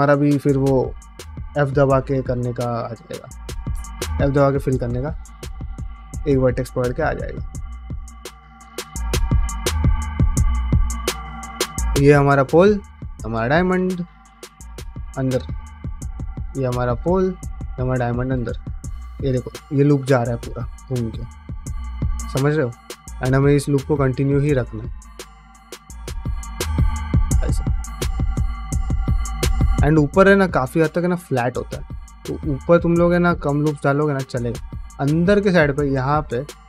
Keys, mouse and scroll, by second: 0.2 middle click, 2.3 ctrl+s, 2.3 shift+middle click, 2.7 middle click, 3.2 shift+middle click, 3.4 middle click, 3.9-8.7 typing, 4.2 click, 4.6 shift+click, 5.5 click, 6.3 click, 6.7 middle click, 7.1 click, 7.7 click, 8.2 middle click, 8.6 click, 9.1 middle click, 9.6 click, 9.8 g, 10.4 click, 10.6 g, 11.1 click, 11.2 g, 11.8 click, 12.8 click, 13.3 click, 13.6 f, 14.8 3, 15.0 click, 15.4 shift+middle click, 15.7 middle click, 16.9 1, 17.1 click, 17.5 click, 18.3 3, 18.5 alt+click, 19.1 alt+click, 19.6 middle click, 19.9 middle click, 20.4-21.6 middle drag, 21.9 shift+middle click, 22.2 middle click, 22.6 1, 22.9 click, 23.2 middle click, 23.5 f, 24.3 click, 24.5 f, 25.2 middle click, 25.6 2, 25.8 f, 26.2 click, 26.5 1, 26.8 click, 26.9 g, 27.7 middle click, 28.2 click, 28.3 g, 28.8 click, 29.0 g, 30.0 middle click, 30.3 g, 31.3 middle click, 31.7 click, 31.8 g, 32.3 click, 32.5 g, 32.8 middle click, 33.2 middle click, 33.6 click, 33.7 g, 34.1 middle click, 34.6 middle click, 35.6 ctrl+middle click, 36.1 ctrl+middle click, 36.5 middle click.